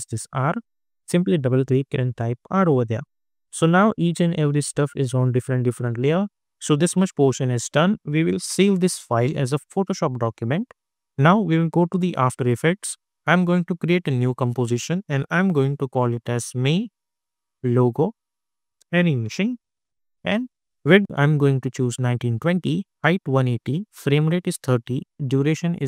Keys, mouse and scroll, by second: 1.8 r, 2.3 Return, 3.2 click, 4.3 scroll up 1, 8.6 ctrl+s, 11.9 click, 15.4-20.2 typing.